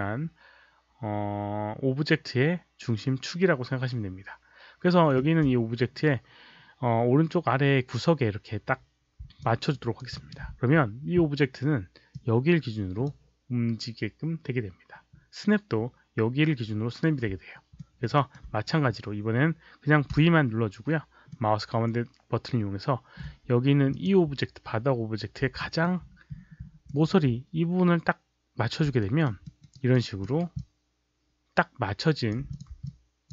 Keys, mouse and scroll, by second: 9.3 alt+click, 9.7 alt+right click, 10.1 alt+middle click, 12.0 click, 17.7 alt+middle drag, 18.1 alt+right click, 18.3 alt+click, 20.1 v, 21.2-23.1 middle drag, 23.8 click, 25.5 alt+v, 25.5 alt+middle click, 25.5 click, 25.5 alt+right click, 25.9-27.0 alt+scroll up 1, 26.8 alt+middle click, 28.5 v, 28.9 alt+right click, 28.9 click, 29.3 alt+middle click, 29.6 alt+right click, 30.1 alt+right click, 30.5-32.2 alt+drag, 32.4 click, 32.8 alt+click.